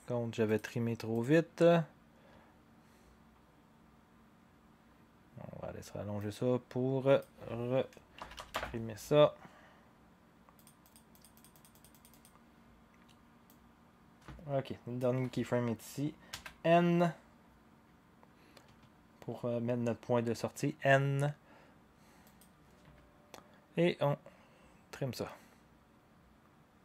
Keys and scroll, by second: 7.9-8.8 typing, 10.4-11.1 typing, 16.4 n.